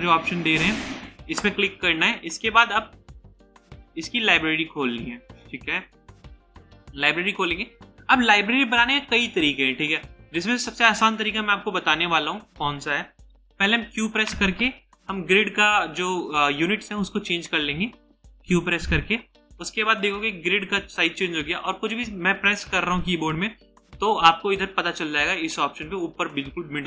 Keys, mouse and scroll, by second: 13.8 q.